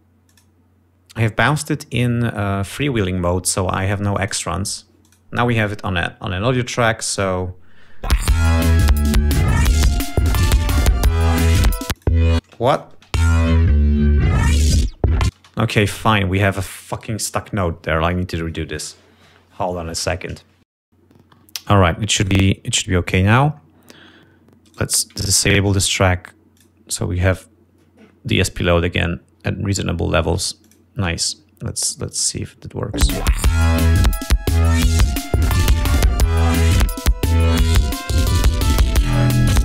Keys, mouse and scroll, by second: 0.8 click, 3.6-5.1 drag, 5.7 click, 7.8 click, 8.7 space, 9.5 ctrl+scroll down 2, 10.4 scroll down 2, 10.9 ctrl+scroll up 2, 12.6 click, 13.0 space, 13.3 click, 13.8 ctrl+scroll up 2, 15.3 ctrl+scroll down 2, 16.0 ctrl+space, 21.7 F1, 22.9 right click, 23.3-23.8 scroll up 2, 23.9 click, 24.2-25.1 scroll up 4, 25.3 right click, 27.1 click, 31.2 click, 32.7 click, 33.6 space, 34.5-35.4 ctrl+scroll down 7, 36.8 click, 37.7-38.9 drag, 39.2 ctrl+scroll up 2.